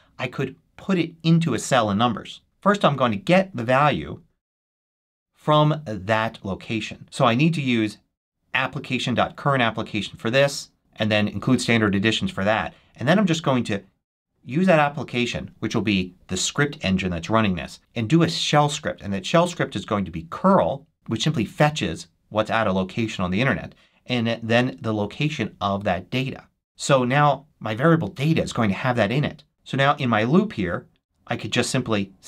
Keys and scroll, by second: 2.4 super+h, 4.5 super+v.